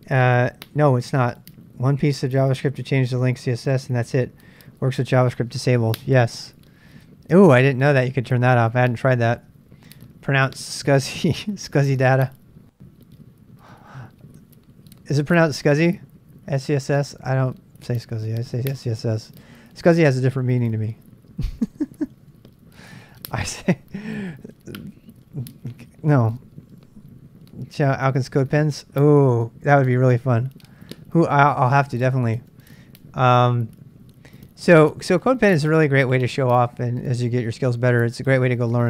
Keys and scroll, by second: 12.3 ctrl+b, 12.3 ctrl+k, 15.8 BackSpace, 16.0 BackSpace, 16.1 BackSpace, 32.3 super+Tab, 33.8 super+Tab.